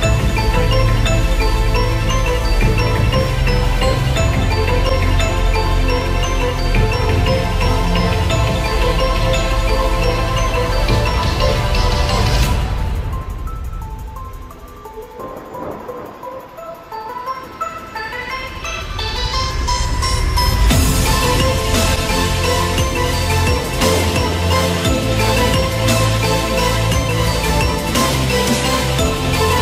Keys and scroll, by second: 12.2 ctrl+g, 17.0 Return, 19.0 ctrl+g, 24.4 Return.